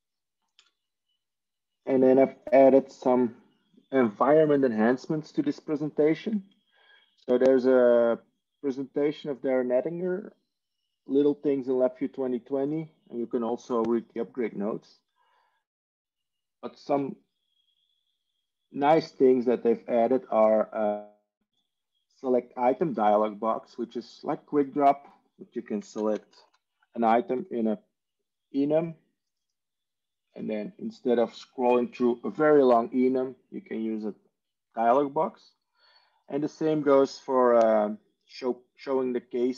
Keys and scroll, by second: 26.2-26.9 typing, 31.0 Tab, 31.7 Tab, 34.6 Tab.